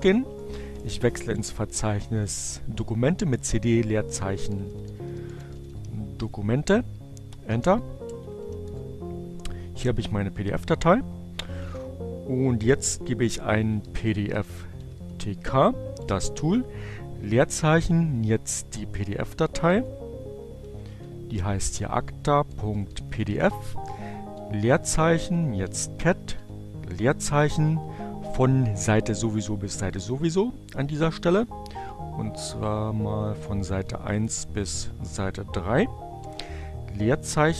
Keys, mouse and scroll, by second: 0.0-0.5 typing, 4.0-5.6 typing, 5.1-7.1 shift+drag, 5.7 Return, 6.7-8.1 typing, 7.2-12.3 drag, 8.2 Return, 11.9-12.8 typing, 14.3-15.3 typing, 17.0-17.8 typing, 19.6-20.4 typing, 21.9-23.0 typing, 24.7-25.6 typing, 32.3-33.3 typing, 35.2 space, 35.3-37.5 drag, 37.3-37.5 typing.